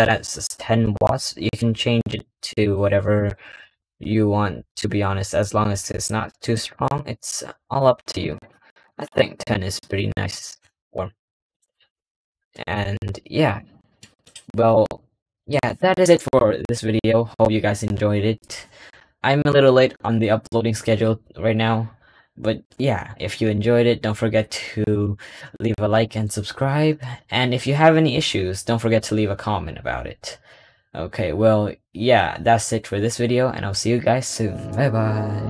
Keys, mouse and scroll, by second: 3.2 click, 6.9-10.4 drag, 11.6 click, 14.1 click.